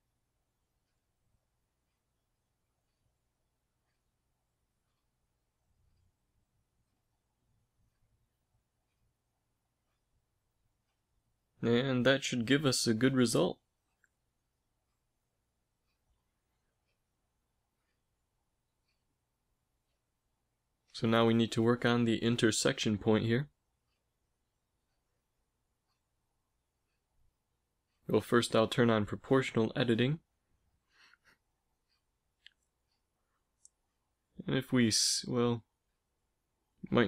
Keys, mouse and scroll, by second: 1.5 g, 3.1 s, 4.4 a, 5.9 click, 6.3 s, 8.0 g, 9.6 s, 11.1 a, 12.3 z, 15.1 Tab, 15.5 a, 19.4 Tab, 20.7-22.0 typing, 24.2 ctrl+KP_Add, 27.4 o, 29.3 s, 32.7 s.